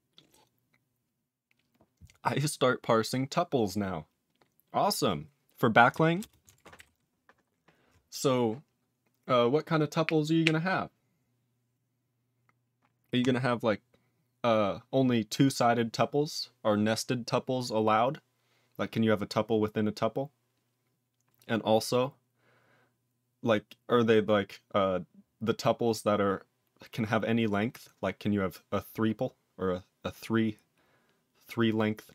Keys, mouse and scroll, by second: 6.2 ctrl+space, 6.5 ctrl+alt+f, 6.7 ctrl+g.